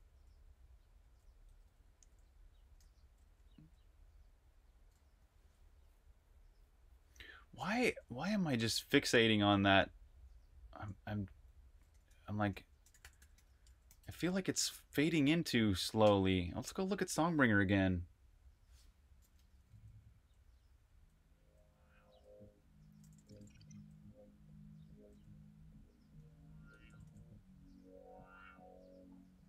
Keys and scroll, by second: 0.0-3.3 typing, 4.5-5.7 typing, 7.7 super+q, 9.1 super+`, 10.1 super+`, 11.9-15.9 typing, 19.5-24.8 typing, 26.5-26.9 typing, 29.2-29.4 typing.